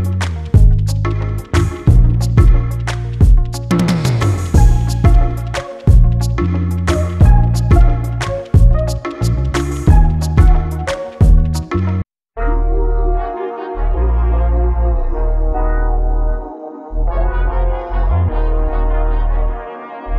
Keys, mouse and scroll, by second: 0.0 n, 0.3 scroll down 1, 0.4 scroll up 2, 0.7 click, 1.0 shift+d, 2.0 scroll down 3, 2.2 shift+d, 3.1 shift+d, 3.9 shift+d, 5.5 shift+d, 6.5 shift+d, 7.9 r, 9.0 shift+d, 10.5 shift+d, 11.7 s, 13.1 Tab, 13.2-13.7 scroll up 1, 13.7 2, 13.7 click, 14.2 g, 14.7 scroll down 1, 14.9 click, 15.2 g, 16.5 Tab, 16.7 scroll down 2, 16.8 scroll up 1, 17.1 scroll down 1, 17.2 right click.